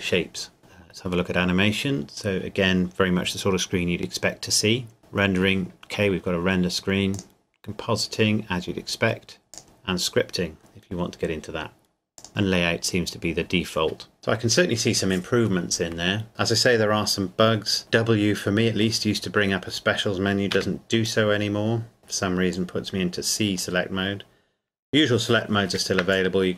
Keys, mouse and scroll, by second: 0.0-0.6 scroll down 1, 0.6 click, 1.0-2.6 scroll down 1, 4.0-5.0 scroll up 1, 5.0 click, 7.1 click, 9.6 click, 12.2 click, 17.8 w, 20.5 Escape, 21.0 click, 22.5 click, 25.6 ctrl+b, 26.1 click.